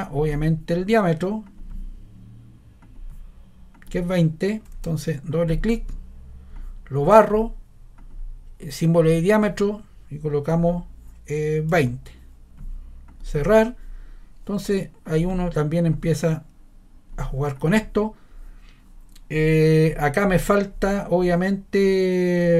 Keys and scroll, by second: 4.7 ↻, 10.5 2, 11.7 0.